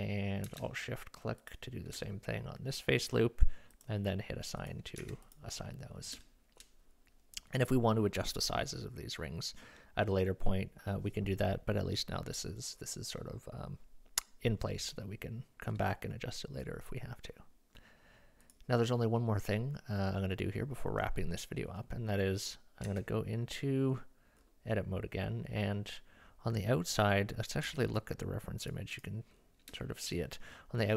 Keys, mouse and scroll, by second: 1.4 alt+shift+click, 3.7 click, 5.0 Tab, 5.3 click, 6.3 shift+middle click, 22.9 Tab, 27.7 Tab, 28.6 click, 28.9 click, 29.8 shift+middle drag.